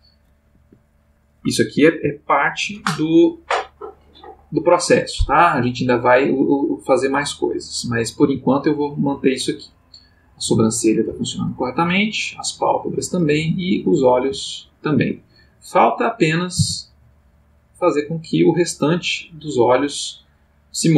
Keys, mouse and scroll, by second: 0.5 Escape, 2.2 ctrl+middle click, 8.2 g, 9.1 Escape, 9.7 click, 10.4 g, 11.1 Escape, 11.7 click, 11.9 g, 12.9 Escape, 13.4 click, 14.1 g, 14.9 Escape, 15.8 click, 16.6 r.